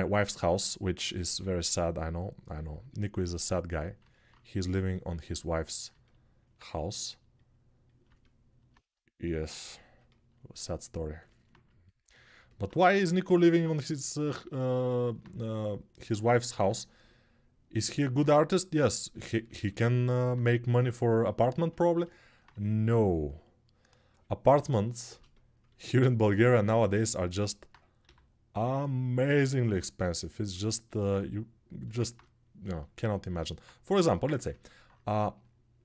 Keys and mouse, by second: 1.0 g, 27.8 g.